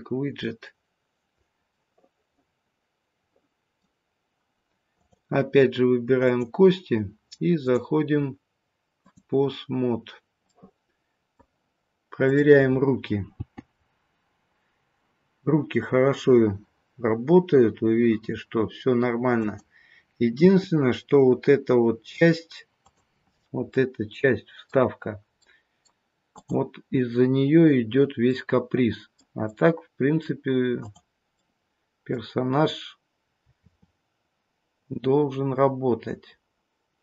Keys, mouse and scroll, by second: 1.7 middle click, 4.9 click, 6.1 click, 10.4 click, 10.4 middle click, 12.2 click, 13.8 g, 23.2-23.7 scroll up 3, 23.2 g, 23.7 middle click, 25.4 middle click, 26.3 click, 27.4 scroll down 1, 28.2 middle click, 29.4 middle click, 30.7 click, 31.4 middle click, 33.6 r.